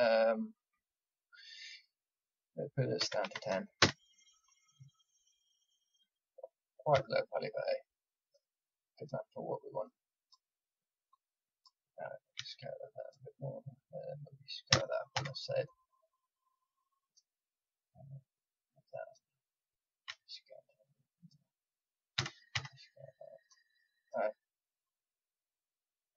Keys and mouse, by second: 5.3-6.9 middle drag, 6.9-8.9 drag, 6.9 s, 9.8-13.0 drag, 12.3 s, 14.7 s, 18.5-21.2 drag, 20.0 s, 22.1 s, 23.7-26.1 drag.